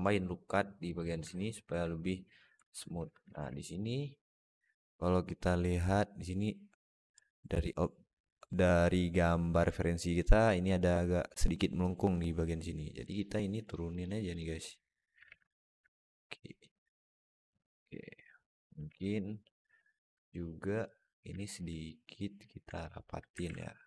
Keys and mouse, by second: 1.1 alt+middle click, 2.4 Tab, 2.8 Tab, 3.1 alt+z, 3.6 click, 4.1 click, 4.2 click, 12.9 click, 13.5 click, 13.8 click, 14.1 click, 14.5 click, 14.7 click, 15.1 alt+z, 15.4 alt+middle drag, 16.0-17.2 drag, 17.3 Tab, 17.6-18.0 alt+middle drag, 18.3 Tab, 18.6 alt+middle click, 19.1 alt+middle click, 19.5 alt+z, 19.7 alt+middle click, 20.7 click, 21.3 middle click, 21.8 click, 22.7 alt+middle click, 23.3 alt+z, 23.6-23.8 drag.